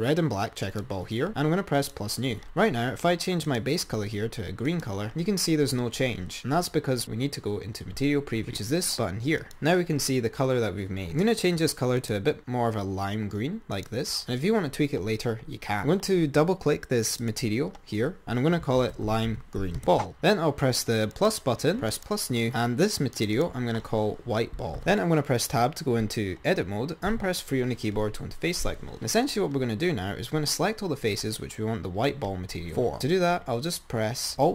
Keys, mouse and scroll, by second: 0.9 click, 2.0-3.4 drag, 3.7 click, 10.9 click, 17.4-19.8 drag, 19.8 e, 21.4 click, 22.1-24.7 drag, 24.7 scroll up 1, 25.8-27.0 scroll up 2, 27.5 typing.